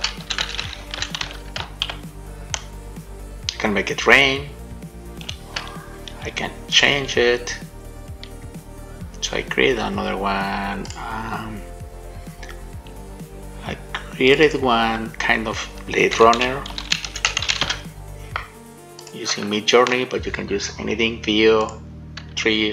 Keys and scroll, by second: 0.3 w, 0.8 w, 2.1 shift+a.